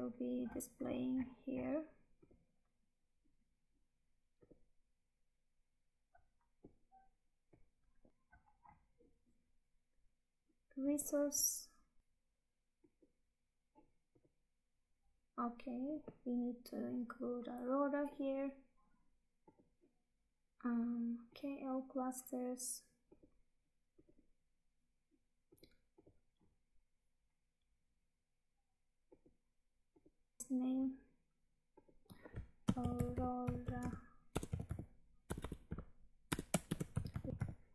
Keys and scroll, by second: 8.1 Tab, 30.4 Tab, 33.7 space.